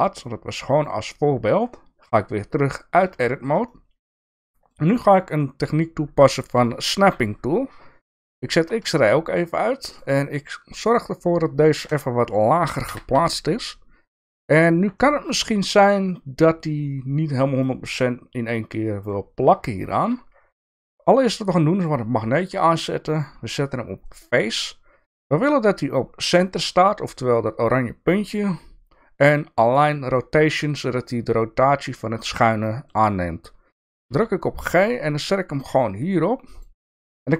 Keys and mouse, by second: 2.5 Tab, 3.2 shift+middle click, 3.7 middle click, 4.4 shift+middle click, 5.4 middle click, 8.5 alt+z, 9.0 shift+middle click, 9.9 click, 11.8 KP_1, 12.8 g, 14.9 shift+middle click, 17.6-19.1 middle drag, 19.8 shift+middle click, 21.7 click, 22.4-31.4 drag, 32.6 shift+middle click, 34.1 g.